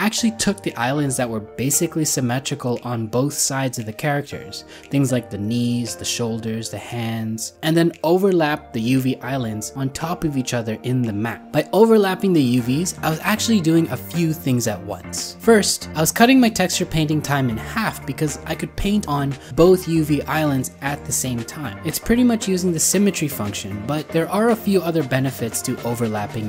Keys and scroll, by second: 0.8 ctrl+z, 1.0 ctrl+z, 8.2 ctrl+z, 8.7 ctrl+z, 8.8 ctrl+z, 14.8 ctrl+z.